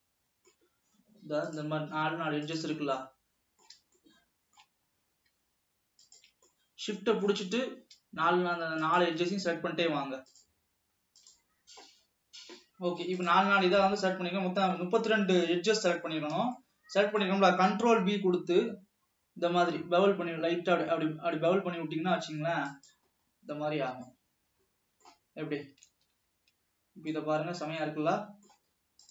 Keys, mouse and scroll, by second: 1.8 shift+click, 2.5 shift+click, 3.1-5.1 middle drag, 5.1-5.9 shift+scroll up 2, 6.1 shift+click, 6.5-7.8 middle drag, 7.8-8.3 scroll up 2, 8.9 shift+click, 13.9-14.4 scroll down 4, 16.7-18.2 shift+middle drag, 18.2 ctrl+b, 23.3-23.8 scroll up 3, 23.8 scroll down 1, 24.1-26.1 middle drag, 26.1 alt+a, 26.7-27.2 scroll down 2, 27.2-29.1 middle drag.